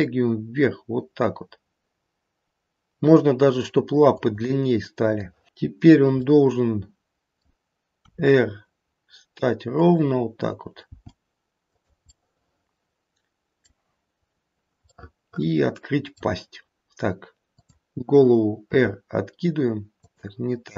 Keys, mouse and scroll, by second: 5.2 middle click, 6.1 middle click, 7.9 r, 10.8 g, 11.9 middle click, 15.0 middle click, 17.6 click, 18.7 r.